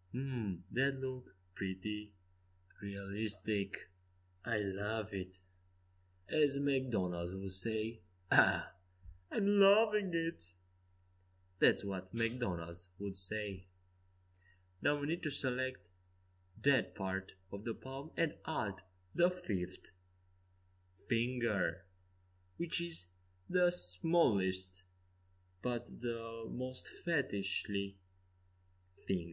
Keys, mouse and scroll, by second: 1.2-3.4 middle drag, 10.7-15.0 middle drag, 15.0-16.6 drag, 15.7 right click, 16.7 right click, 17.2 e, 20.0 s, 21.9-23.8 drag, 24.3-25.9 middle drag, 26.0 middle click, 27.8 e, 29.0 s.